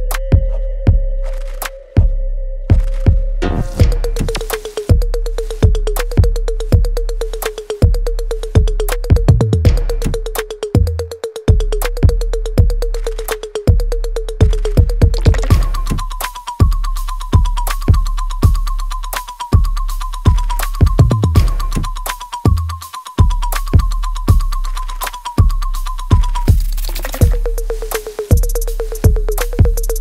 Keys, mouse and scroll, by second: 9.3 click, 13.7 click, 14.5 right click, 15.4 space, 16.7 alt+right click, 17.1 alt+middle click, 17.7 alt+right click, 18.7 click, 19.3 alt+middle click, 19.7 alt+right click, 20.9 r, 21.6-23.6 drag, 27.1-30.0 drag.